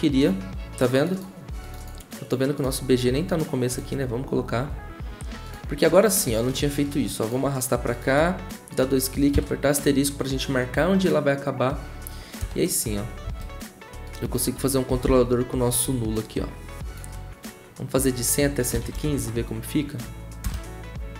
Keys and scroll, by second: 4.6 ctrl+w, 9.3 *, 12.4 0, 14.9 typing, 18.5-20.4 typing.